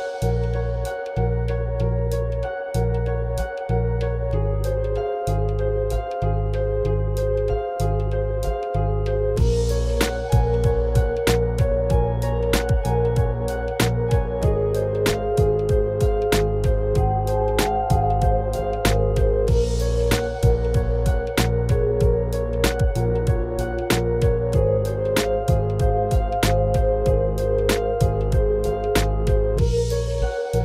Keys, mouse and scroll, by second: 0.1-3.1 right drag, 3.1-6.3 drag, 10.1-10.8 drag, 12.8-15.8 drag, 18.4-21.4 drag, 24.0 Tab, 24.9-25.5 scroll up 1, 25.5-26.4 scroll up 1, 26.4 click, 29.4 g.